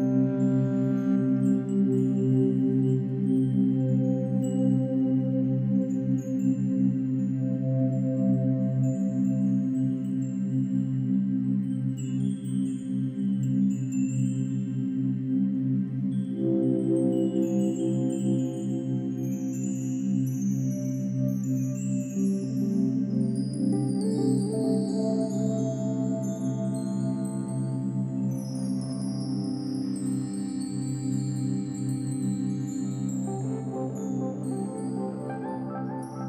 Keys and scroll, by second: 3.3 ctrl+e, 4.6 ctrl+e, 5.0 ctrl+-, 7.4 ctrl+=, 13.2 F1, 16.3 ctrl+=, 16.4 ctrl+-, 22.0 space, 23.2 Delete, 25.6 space.